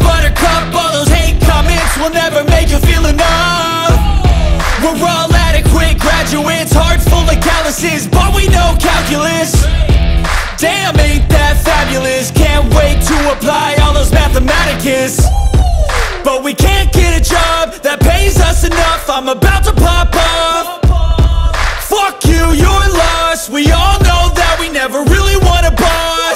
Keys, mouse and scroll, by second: 1.9 middle click, 2.3 KP_Decimal, 2.7 scroll down 2, 2.8 middle click, 3.6 scroll up 2, 3.9 middle click, 4.4 e, 5.4 KP_1, 6.0 s, 7.2 shift+d, 8.3 p, 9.0 Tab, 9.1 click, 9.6 middle click, 9.9-10.5 scroll up 1, 10.5 Tab, 10.8 a, 11.3 e, 13.0 e, 14.3 s, 16.2 scroll down 2, 16.3-17.4 middle drag, 17.4 scroll up 2, 17.6 middle click, 18.2-19.3 scroll up 1, 19.3 ctrl+KP_Add, 20.0 click, 20.7-21.9 scroll down 3, 20.8 Tab, 21.0 click, 21.9-23.2 drag, 23.5-24.1 scroll down 1, 24.1 click, 24.9 click, 25.3 middle click, 25.7-26.3 drag.